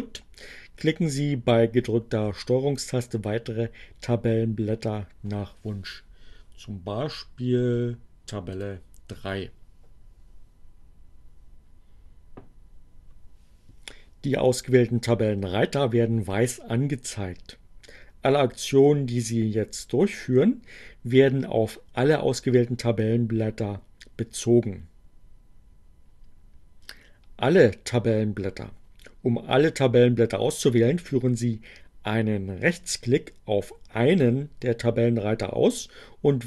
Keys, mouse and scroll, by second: 8.5 ctrl+click.